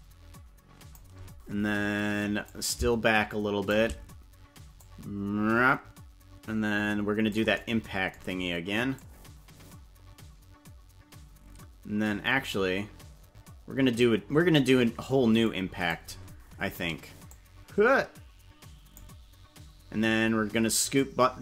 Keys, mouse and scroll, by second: 2.4-3.7 drag, 4.8-7.3 drag, 9.0-14.6 drag, 15.4 click, 17.3-19.0 drag, 20.9 click.